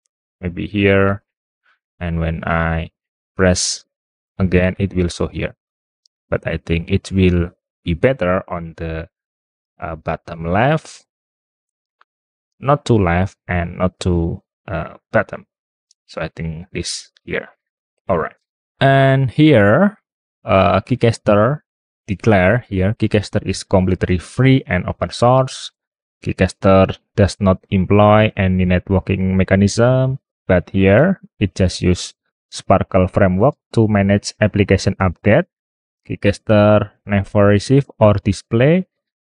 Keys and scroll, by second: 5.5 super+t.